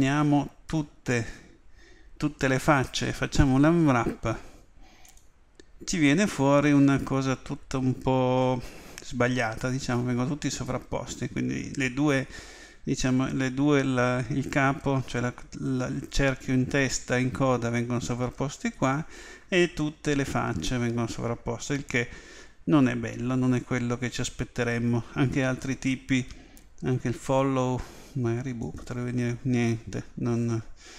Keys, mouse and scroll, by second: 0.7 a, 1.1 a, 3.5 u, 25.3 u.